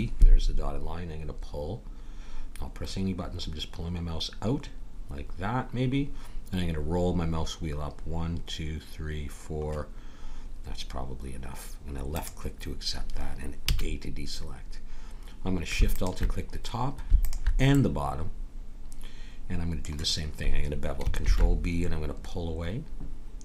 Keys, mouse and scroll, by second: 13.7 a, 15.9-19.1 drag, 17.7 middle click, 21.2 ctrl+b.